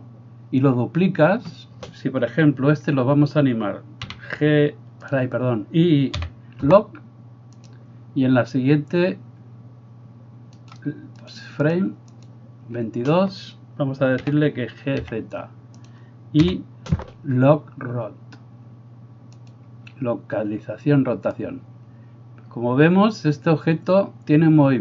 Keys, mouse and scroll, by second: 4.1 g, 6.2 i, 10.7-24.8 right drag, 12.3-15.9 drag, 12.3-16.5 middle drag, 14.3 g, 16.5 i, 19.0-24.8 middle drag, 21.4-24.8 drag.